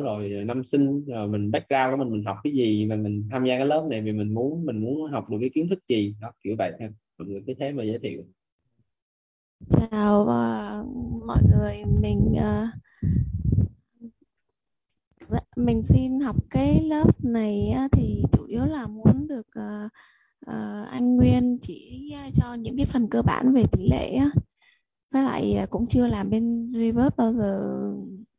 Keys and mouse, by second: 5.7 click, 7.1 click, 11.3 click, 17.4 click, 26.1 click.